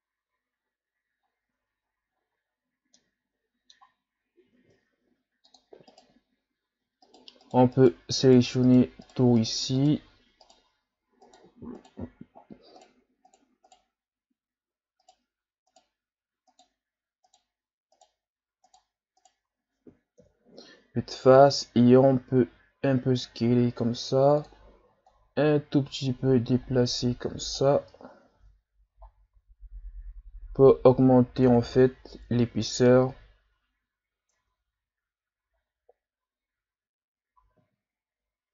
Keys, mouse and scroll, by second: 1.2-1.5 scroll up 3, 1.6 Tab, 2.2-2.5 shift+scroll down 1, 2.5-2.9 scroll up 1, 3.0-4.7 middle drag, 4.7 ctrl+Tab, 5.9 right click, 7.0 shift+right click, 7.4 shift+right click, 7.8 shift+right click, 8.3 shift+right click, 8.7 shift+right click, 9.0 shift+right click, 9.4 shift+right click, 9.8 shift+right click, 10.4 shift+right click, 11.2 shift+right click, 11.8 shift+right click, 12.3-12.8 shift+scroll up 5, 12.8 shift+right click, 13.3 shift+right click, 13.7 shift+right click, 15.0 shift+right click, 15.7 shift+right click, 16.5 shift+right click, 17.3 shift+right click, 17.9 shift+right click, 18.7 shift+right click, 19.2 shift+right click, 20.2 KP_1, 21.1 scroll down 3, 21.4 shift+scroll up 2, 22.0-22.5 scroll up 1, 22.5 s, 25.1-28.1 drag, 28.1 ctrl+scroll up 1, 28.3 Tab, 29.1-29.5 shift+scroll down 3, 30.2-30.8 scroll down 1, 32.4-33.3 shift+scroll down 3, 33.3-34.3 scroll up 2, 34.3 Tab, 35.6-36.2 scroll down 3, 36.4-37.4 scroll up 2, 37.4 s.